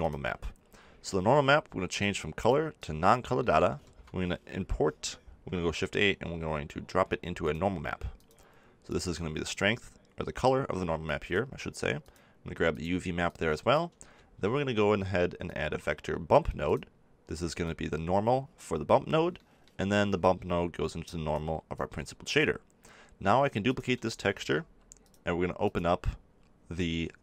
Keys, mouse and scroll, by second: 0.0-4.9 drag, 8.8-15.8 drag, 16.7 shift+click, 17.6-19.5 drag, 20.2-21.7 drag.